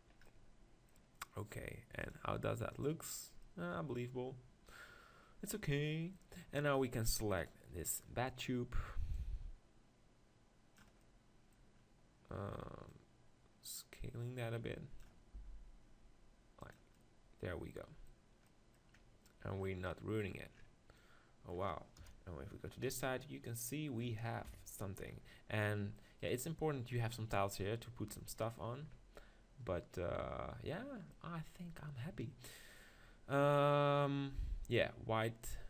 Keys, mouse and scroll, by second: 2.0-4.0 drag, 4.3-5.3 middle drag, 6.4-7.4 middle drag, 7.4 right click, 7.8-10.8 middle drag, 10.8 click, 10.9-12.9 middle drag, 12.9-14.7 drag, 15.3 s, 16.7-18.5 drag, 22.0 KP_0, 24.5 KP_7, 26.2-28.1 right drag, 28.1-32.8 middle drag, 33.1-35.6 middle drag.